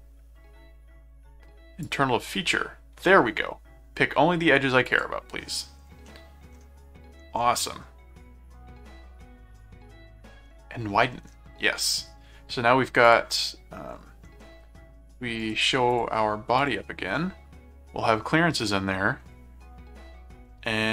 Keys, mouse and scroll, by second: 1.8 click, 4.9 click, 6.0 middle click, 13.0 click, 15.4 right click, 15.9 click, 16.6 click, 17.2-19.2 middle drag.